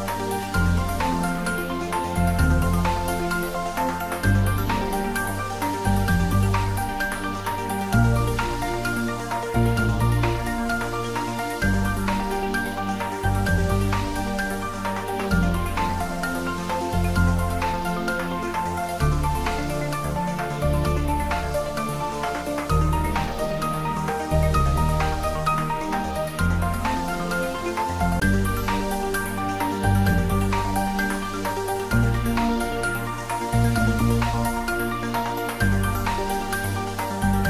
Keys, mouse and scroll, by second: 1.2 click, 1.8-2.9 scroll up 1, 2.9 typing, 8.3 click, 8.6 scroll up 1, 10.9-11.4 typing, 22.7 click, 23.9 s, 24.2 z, 25.3 click, 26.1 g, 26.6 z, 30.4 scroll down 1, 30.8 middle click, 32.0-32.4 scroll up 1, 32.9-36.2 middle drag.